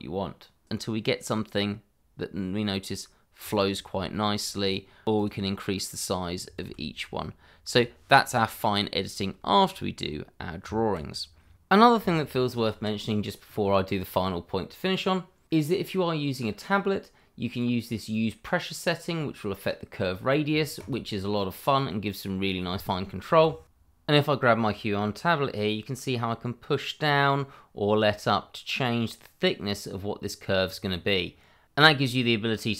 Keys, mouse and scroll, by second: 2.8 click, 3.0 scroll down 1, 3.2 shift+middle click, 3.5 click, 4.1 alt+s, 5.2 click, 6.6 alt+s, 7.7 click, 7.9 scroll down 1, 8.4 shift+middle click, 9.1 scroll down 1, 9.5 shift+middle click, 10.0 scroll up 1, 10.6 Tab.